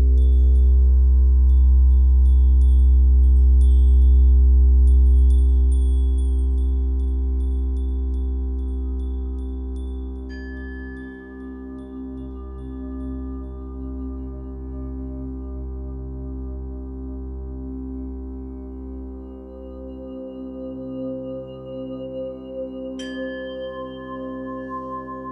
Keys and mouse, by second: 2.6 g, 3.0 z, 4.0 click, 4.9 alt+click, 5.8 click, 6.9 1, 7.3 g, 7.8 x, 9.6 click, 10.4 r, 10.8 z, 12.8 click, 13.5-19.1 alt+drag, 20.2-21.2 drag, 20.2 typing, 21.2 typing, 22.6 typing.